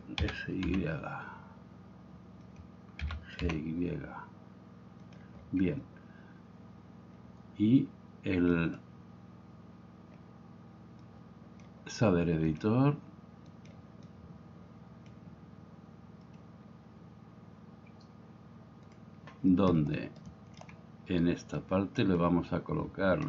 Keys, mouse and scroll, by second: 0.2 s, 0.7 y, 2.5 click, 3.0 g, 3.5 y, 5.0 click, 8.6 click, 11.1-11.7 drag, 12.6 click, 14.1-15.2 drag, 20.2-20.6 shift+drag.